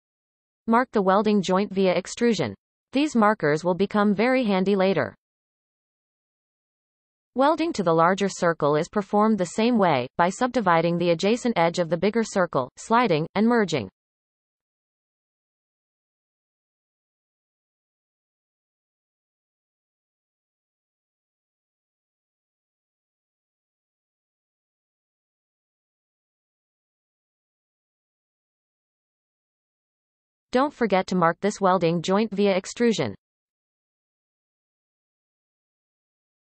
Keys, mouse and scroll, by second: 1.3 click, 2.5 e, 4.1-5.9 scroll down 17, 5.9 shift+middle click, 6.2-6.7 scroll up 1, 6.7 shift+middle click, 7.2 scroll up 1, 7.7-8.4 scroll up 2, 7.7 shift+middle click, 10.5 click, 11.5 shift+click, 12.2-12.7 scroll up 2, 12.7-13.1 shift+middle drag, 13.1-13.7 scroll up 2, 15.1-16.7 right drag, 16.7 click, 17.8 g, 20.1 scroll up 1, 23.0 g, 26.2 click, 26.6 shift+click, 27.7 m, 30.5 click, 31.0-33.2 scroll down 10, 33.2 e, 35.6-36.4 scroll down 9.